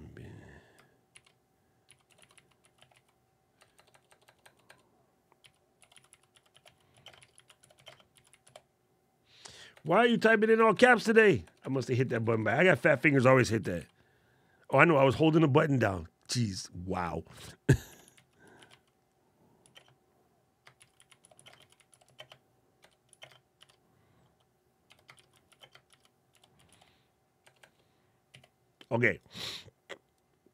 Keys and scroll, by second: 0.5 shift+Caps_Lock, 0.9-3.4 typing, 5.0-9.5 typing, 20.6 shift+e, 21.3 shift+f, 23.3 shift+b, 24.9 shift+d, 25.7 shift+g.